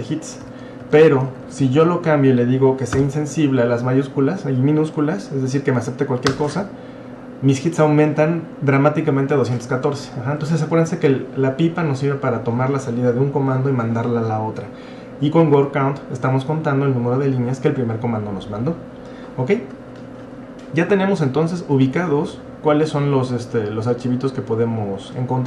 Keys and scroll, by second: 0.4 Up, 0.6 Left, 0.8 Left, 1.0 Left, 1.2 Left, 2.9 i, 6.4 Return.